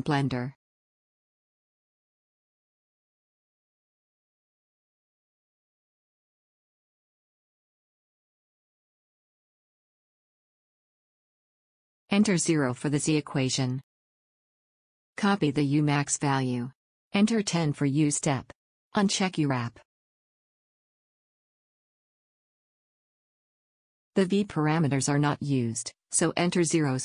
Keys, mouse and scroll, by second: 1.5 click, 2.4 click, 2.8-4.9 drag, 22.1-24.9 drag, 25.4-27.0 drag.